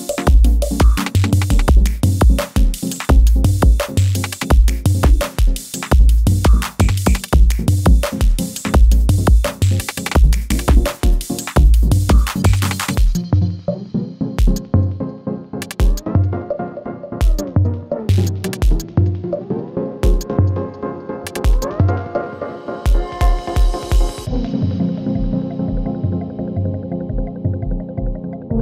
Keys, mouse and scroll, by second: 0.0-3.2 typing, 4.9-14.3 drag, 16.7 =, 17.5-19.2 drag, 23.1 space, 24.6 click, 25.4 F9, 26.2-27.7 drag.